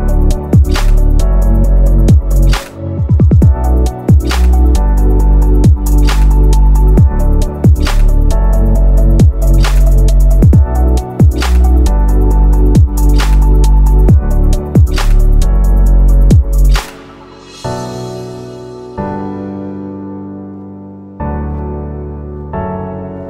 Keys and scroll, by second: 7.5 Left.